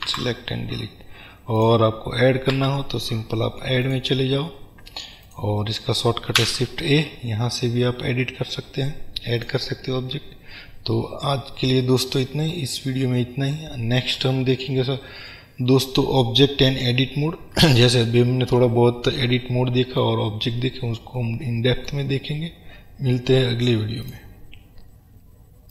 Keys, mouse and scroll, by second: 0.3 Delete, 0.9-1.6 scroll down 1, 1.7 click, 2.7 Delete, 4.0-5.5 drag, 6.5 shift+a, 9.5 click, 12.4-25.7 middle drag, 13.0-13.7 scroll down 2, 20.6-21.3 scroll down 1.